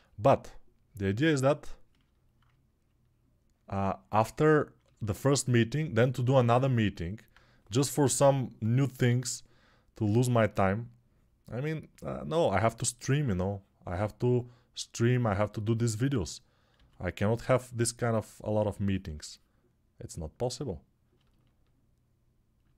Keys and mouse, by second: 7.8 ], 8.0 ], 16.5 s.